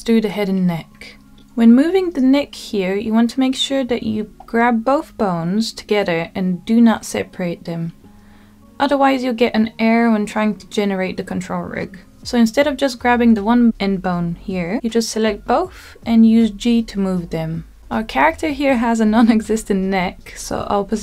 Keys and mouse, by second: 0.0 click, 0.5-1.6 middle drag, 3.7 g, 5.6 Escape, 6.9-8.6 drag, 9.8 g, 12.8 z, 14.7 click, 15.5-16.2 drag, 17.4 click, 18.3 g.